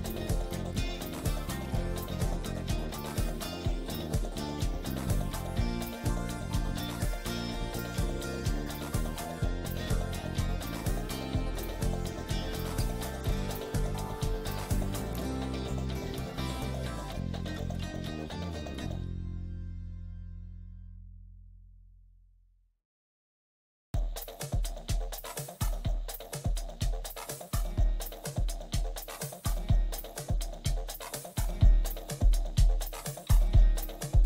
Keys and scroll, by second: 1.3 shift+F2, 1.8 shift+Page_Up, 2.2 F3, 4.4 c, 4.8 Escape, 5.2 F4, 9.5 F2, 15.6 space, 15.9 F3, 18.5 ctrl+z, 20.4 ctrl+r, 21.5 F3, 22.4 ctrl+r, 26.0 ctrl+g, 27.9 c, 28.2 Escape, 28.6 F2, 31.3 shift+F2.